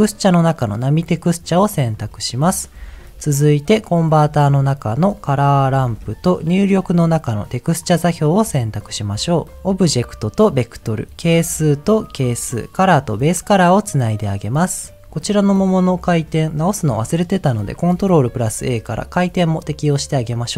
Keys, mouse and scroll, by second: 2.1 middle click, 2.4-2.8 scroll down 2, 2.8 shift+a, 5.7 shift+a, 9.6 click, 9.7 click, 11.3-12.4 drag, 13.1 click, 15.9 click, 18.0 ctrl+a.